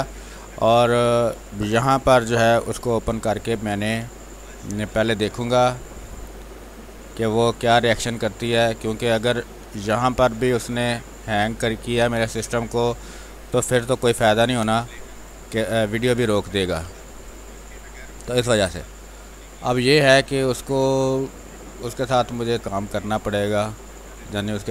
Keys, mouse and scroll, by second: 5.2 ctrl+z, 7.2-9.2 drag, 9.2 space, 11.2-12.3 drag, 12.3-15.1 typing, 12.5 click, 13.6 click, 14.7 click, 16.1-18.2 drag, 18.2 space, 18.4 click, 18.7 space, 19.4-20.8 drag, 20.8 space, 21.0 click, 21.2 space, 22.6-24.7 drag.